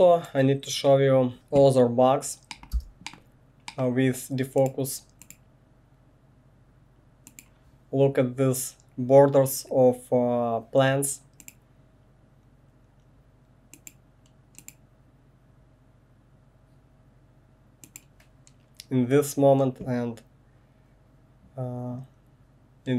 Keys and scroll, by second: 1.3 1, 2.7 space.